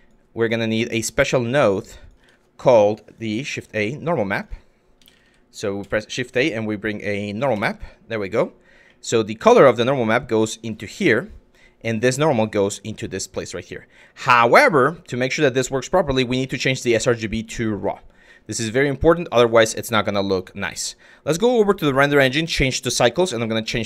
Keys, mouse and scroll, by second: 0.8 click, 1.6 click, 1.8 Tab, 2.7 click, 3.1 shift+a, 8.5 click, 9.1-10.4 drag, 11.6-12.6 drag, 13.9-14.5 drag, 15.4-17.5 drag, 20.4 click, 21.0-21.8 drag, 22.6-23.4 drag.